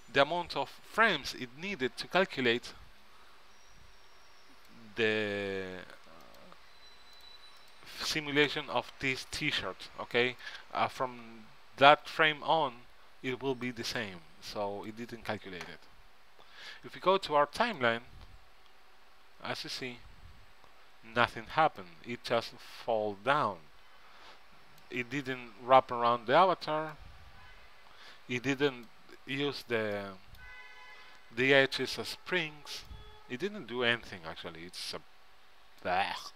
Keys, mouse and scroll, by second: 2.7-4.6 drag, 6.4-8.2 right drag, 9.4-11.3 drag, 13.8-17.9 drag, 18.3-19.6 drag, 19.6 right click, 21.9 right click, 28.4-30.1 drag, 30.1-33.0 middle drag, 33.0-35.3 right drag.